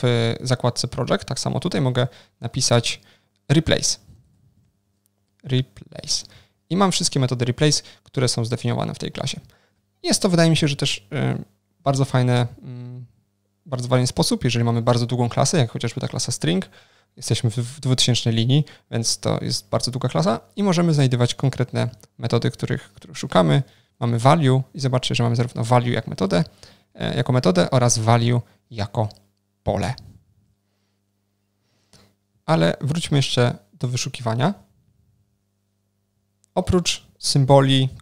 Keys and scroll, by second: 2.9 Down, 21.5 super+F12, 22.3 Down, 23.3 Up, 31.0 super+F12.